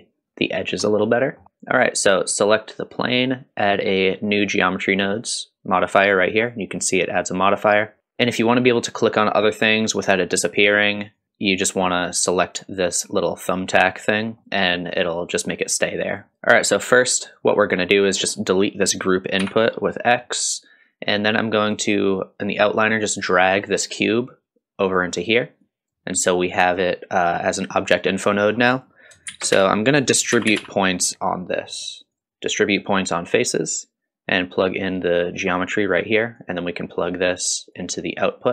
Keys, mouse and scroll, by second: 0.8 scroll up 1, 1.2 middle click, 1.4 click, 2.1 drag, 5.1 click, 7.8 middle click, 8.0 scroll down 1, 9.6 click, 11.0 click, 14.4 middle click, 14.9-16.3 drag, 16.3 middle click, 16.8 click, 17.6-18.4 middle drag, 18.4 click, 19.4 x, 21.7 click, 23.1-25.0 drag, 25.6 click, 26.6 click, 28.4-28.7 middle drag, 28.7 click, 29.3 shift+a, 34.6-35.5 drag, 36.4-37.8 drag.